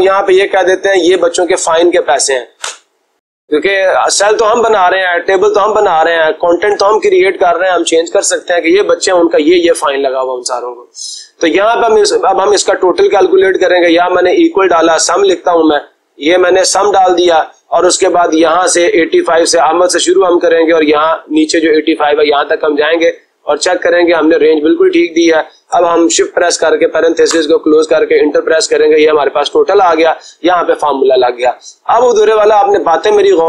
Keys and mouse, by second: 2.9 Return, 11.6-12.6 drag, 13.3 typing, 14.5-15.8 typing, 17.1 Tab, 21.9-23.0 drag, 24.2-25.3 drag, 26.4 ), 27.3 Return, 29.4-30.5 drag.